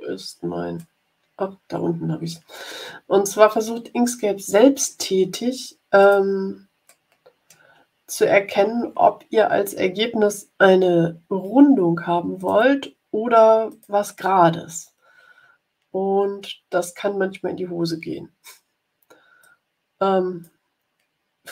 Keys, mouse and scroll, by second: 0.7-1.7 drag, 1.7 middle click, 3.1-3.6 ctrl+scroll up 2, 4.4 ctrl+scroll up 1, 5.9 click, 6.8 click, 8.1 ctrl+scroll up 2, 12.3 click, 13.6 click, 19.3-20.5 drag.